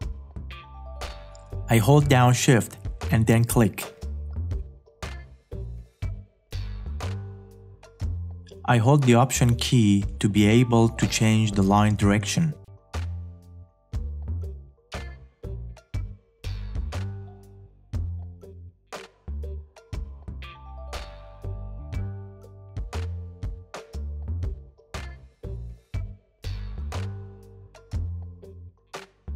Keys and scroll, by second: 23.8 space.